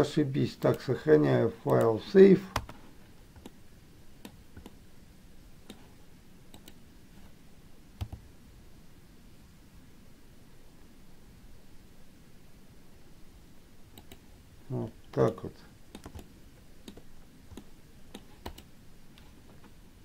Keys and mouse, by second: 0.9-3.6 drag, 3.7 middle click, 4.9-6.0 middle drag, 6.9 click, 15.6 middle click, 16.5 shift+middle click, 17.8 middle click, 18.7 click.